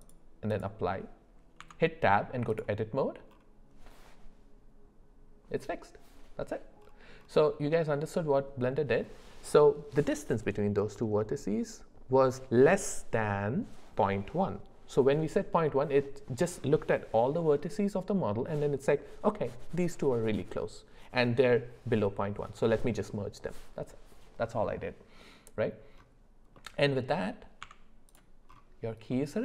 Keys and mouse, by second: 0.1 click, 1.6 Tab, 26.5 middle click, 27.6 Tab, 29.1 middle click.